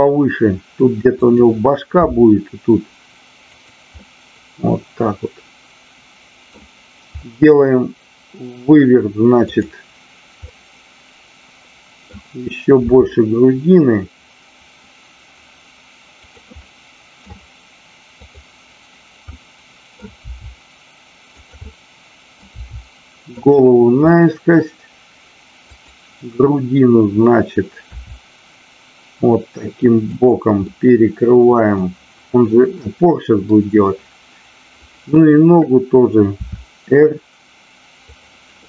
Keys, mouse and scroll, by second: 1.2 click, 2.1 g, 3.9-6.6 middle drag, 9.4 click, 10.4-12.2 middle drag, 12.8 r, 16.2 click, 16.7 middle click, 18.2 click, 19.3 middle click, 20.2 r, 21.4 click, 21.6 middle click, 22.6 r, 23.9 middle click, 25.7 click, 27.9 r, 30.0 click, 30.5-31.7 middle drag, 32.8 middle click, 34.8 click, 36.3 r, 38.2 click.